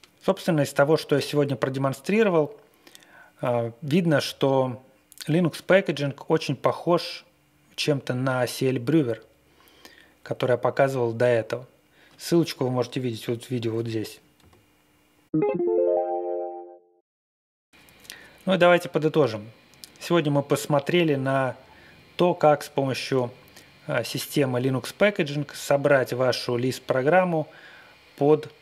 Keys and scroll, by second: 14.3 super+Tab, 15.2 super+Tab.